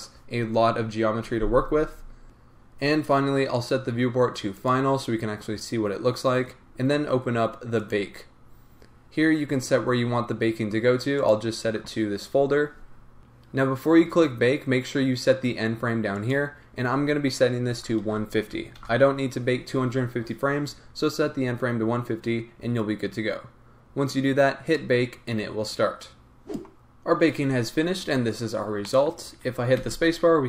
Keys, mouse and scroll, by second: 6.1-7.8 scroll down 1, 11.1 click, 13.2-14.0 scroll up 1, 26.6 click, 28.8-29.8 middle drag, 29.8 space.